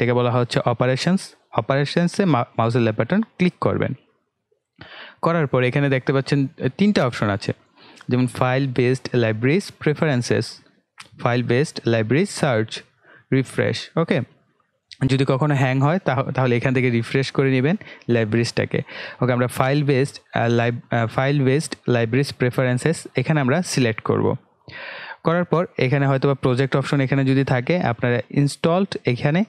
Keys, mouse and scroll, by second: 23.8 click, 26.0 click, 28.5 click.